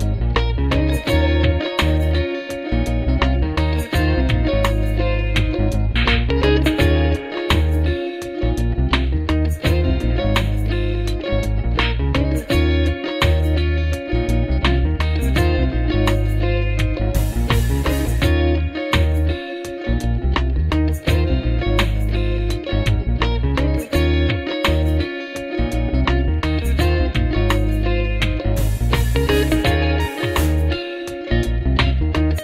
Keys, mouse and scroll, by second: 2.2 alt+BackSpace, 4.0 ctrl+d, 6.0 ctrl+=, 6.4 ctrl+=, 6.6 ctrl+=, 7.9 space, 10.5 double click, 11.4 x, 11.6 alt+BackSpace, 12.6 ctrl+d, 14.8 ctrl+-, 18.2 alt+click, 19.7 double click, 22.3 space, 28.1 scroll down 1.